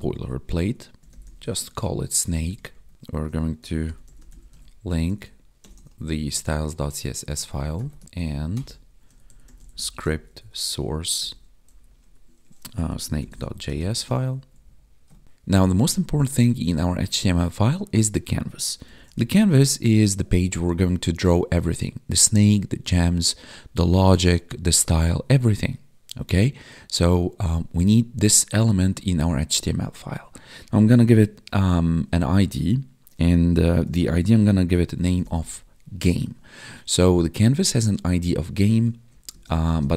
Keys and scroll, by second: 1.6 ctrl+s, 2.2 Right, 2.8 Down, 2.9 Tab, 6.8 Tab, 7.2 ctrl+s, 8.0 Down, 12.0 Tab, 14.1 ctrl+s, 14.4 Up, 36.0 Tab, 39.0 Left, 39.2 space, 39.4 Left, 39.6 space.